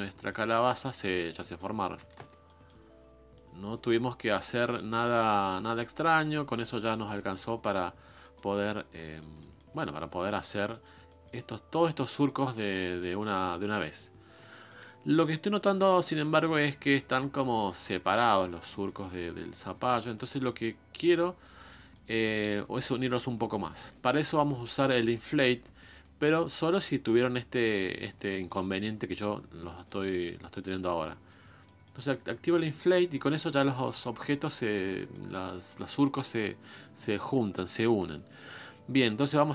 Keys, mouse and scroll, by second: 0.0 middle click, 0.7 click, 1.4 middle click, 2.2 ctrl+z, 2.4 middle click, 2.8-3.3 scroll up 1, 3.3 click, 4.3 middle click, 5.1 click, 5.7 scroll down 1, 6.0 middle click, 6.3 scroll down 2, 6.5 middle click, 7.5-7.8 scroll up 1, 7.8-8.9 middle drag, 8.9-9.4 scroll down 1, 9.4 middle click, 10.1-10.6 scroll up 1, 10.6-18.9 middle drag, 18.9 scroll down 1, 19.0-19.5 scroll up 1, 19.5 click, 20.4-20.9 scroll down 2, 20.9-22.1 middle drag, 22.1-24.7 scroll up 1, 24.7 click, 25.6 f, 25.9 f, 26.3-27.7 middle drag, 27.7 click, 28.3 middle click, 28.7-29.9 drag, 29.9 middle click, 30.2 click, 31.0-32.0 middle drag, 32.0 click, 32.5-34.4 middle drag, 34.4-34.7 scroll up 2, 34.7 scroll down 1, 34.9-39.5 middle drag.